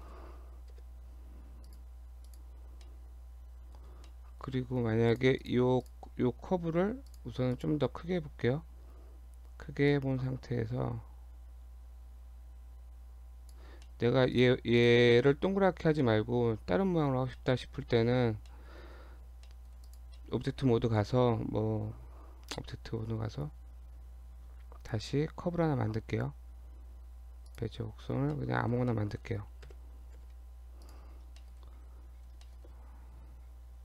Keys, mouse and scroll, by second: 0.7 KP_7, 1.7 click, 2.3 click, 2.8 middle click, 4.0 middle click, 5.1 click, 5.4 click, 5.8 click, 6.1 scroll up 2, 6.7-7.1 scroll down 2, 7.1 click, 7.5 click, 8.7 scroll down 1, 9.9 click, 13.9 middle click, 14.4 click, 14.8 click, 15.1-15.5 scroll up 1, 16.1 middle click, 16.1 scroll up 2, 17.1 scroll down 2, 17.3 middle click, 17.7-18.2 scroll down 3, 18.3 Tab, 18.5 middle click, 19.3 Tab, 19.5 middle click, 19.9 click, 20.2 middle click, 21.0 shift+a, 27.9-28.4 scroll down 3, 28.4 middle click, 28.9 middle click, 29.6 KP_7, 30.2 g, 31.1-32.7 scroll up 8, 31.4 shift+middle click, 32.0 Tab, 32.5 shift+middle click, 33.3 Tab, 33.5 scroll up 1.